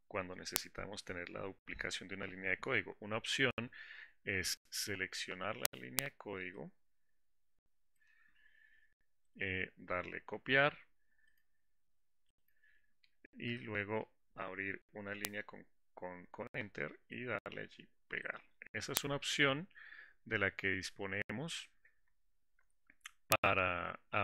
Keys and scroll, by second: 11.7 ctrl+Insert, 18.6 shift+Insert.